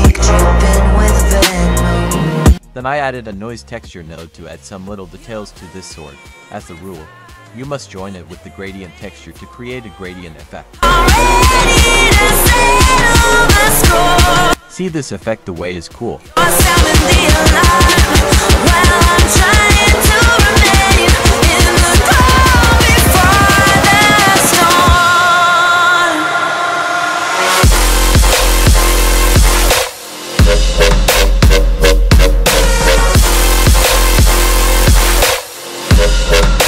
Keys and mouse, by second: 0.1-0.8 shift+middle drag, 2.1 click, 2.8 F3, 7.4 click, 7.8 click, 8.5 click, 9.3 click, 18.7 F3, 20.6 click, 21.1-21.8 drag, 22.2 click, 22.3 typing, 22.5 F3, 24.0 click, 24.1 click, 24.8 g, 25.1 click, 25.5 g, 26.7 F3, 30.6 click, 31.3-31.7 drag, 33.8 click, 34.3 ctrl+t.